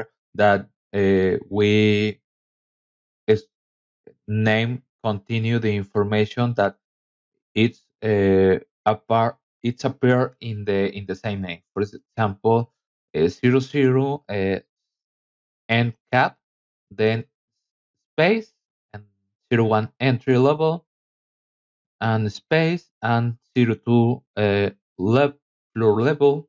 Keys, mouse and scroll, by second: 4.0 -, 5.3-6.7 typing, 8.2 shift+-, 9.0 shift+c, 9.7 a, 14.1 KP_Subtract, 15.8-20.9 typing, 23.1-25.7 typing, 23.3 KP_Subtract.